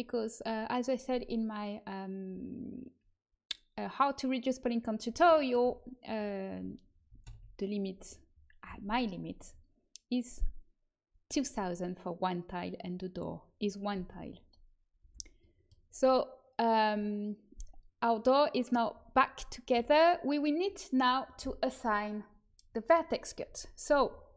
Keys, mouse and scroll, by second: 7.2 alt+h, 13.9 a, 14.9 a, 19.3 middle click, 19.7 a.